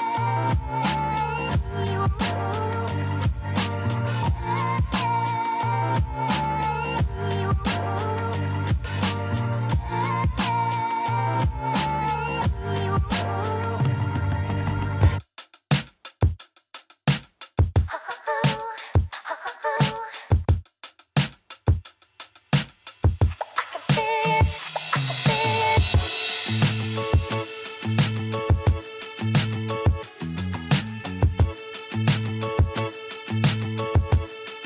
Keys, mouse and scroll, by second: 2.2 click, 3.4 click, 4.0 Tab, 7.2 shift+z, 8.2 s, 11.0-11.8 scroll up 5, 11.8-13.3 shift+middle drag, 13.3 g, 22.2-24.0 scroll up 1, 24.0 s, 29.3 ctrl+r, 33.0-33.5 scroll up 1, 33.5-34.6 shift+middle drag.